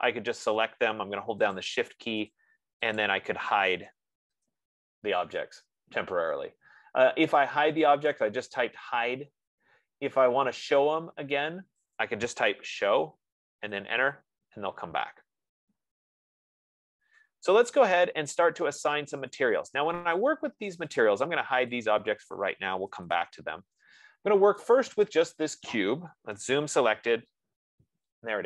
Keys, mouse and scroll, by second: 0.3 click, 2.0 shift+click, 2.7 click, 3.3 click, 4.5 …, 4.7 Return, 6.0 …, 8.5 click, 9.8 scroll, 12.6-14.0 typing, 14.4 Return, 19.9-23.7 drag, 23.7 Return.